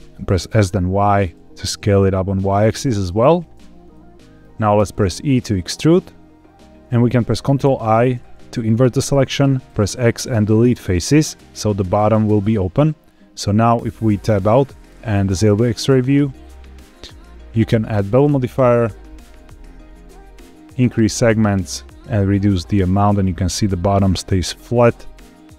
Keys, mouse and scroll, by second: 0.0 click, 0.4 s, 0.6 y, 2.9 click, 3.8 middle click, 4.7 e, 6.6 click, 6.6 shift+middle click, 6.6-7.4 scroll up 1, 7.6 ctrl+i, 9.6 x, 13.7 Tab, 15.1 click, 15.6-16.1 shift+middle drag, 16.4-16.9 scroll up 3, 17.0 shift+middle click, 17.7-19.1 drag, 20.7 click, 21.3-25.5 shift+drag.